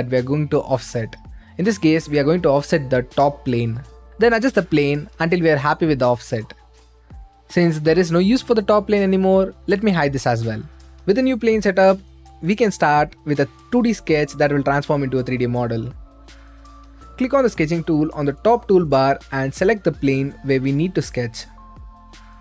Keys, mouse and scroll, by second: 1.1-2.7 right drag, 2.7 middle click, 3.3-4.5 right drag, 4.7-6.1 drag, 6.8 click, 8.1-9.1 middle drag, 9.3 right click, 11.1-12.2 drag, 12.4-13.8 right drag, 13.8-14.9 drag, 16.2 click, 18.1 click, 18.6 middle click, 19.6-20.7 drag, 20.7-22.4 middle drag.